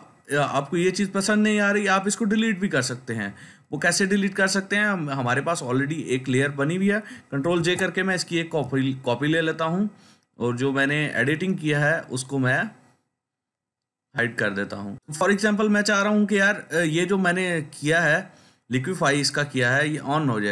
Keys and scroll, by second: 7.4 ctrl+j.